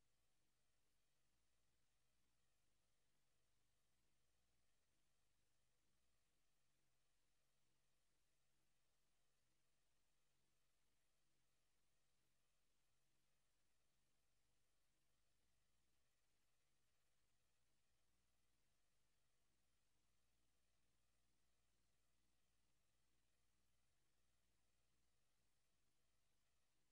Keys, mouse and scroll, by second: 2.4 KP_0, 4.0 click, 6.1 click, 13.6 Escape, 15.9 click, 19.7 click, 26.3 click.